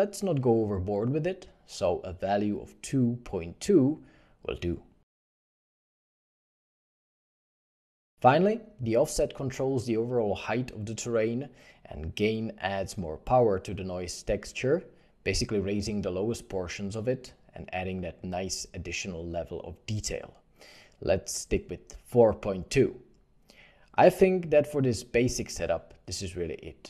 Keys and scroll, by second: 1.2 2, 1.4 Return, 3.7 2, 4.2 Return, 4.4 ., 4.4 2, 4.6 Return, 12.7 4, 12.9 ., 13.0 5, 13.0 Return, 14.4 8, 14.5 Return, 15.6 1, 16.5 4, 17.0 ., 17.2 Return, 17.2 5, 19.7 4, 20.1 2, 20.1 ., 20.2 Return.